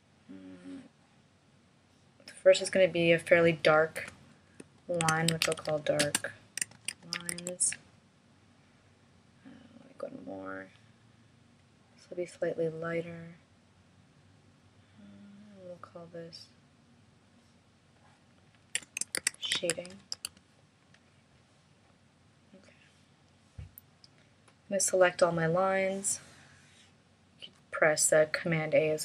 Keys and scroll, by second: 5.0 shift+d, 6.7 shift+l, 19.2 shift+s.